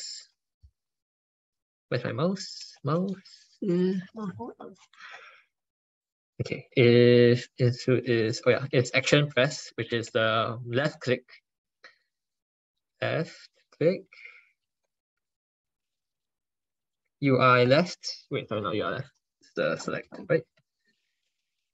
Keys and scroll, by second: 18.8 ctrl+BackSpace, 19.2 ctrl+BackSpace.